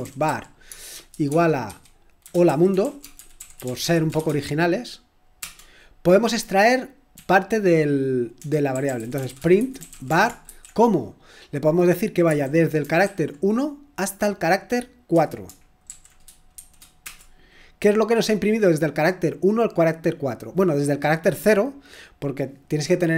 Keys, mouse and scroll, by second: 0.0-4.2 typing, 5.4 typing, 7.1 typing, 8.4-10.5 typing, 12.3-13.0 typing, 15.1-17.0 typing, 19.1-20.3 typing.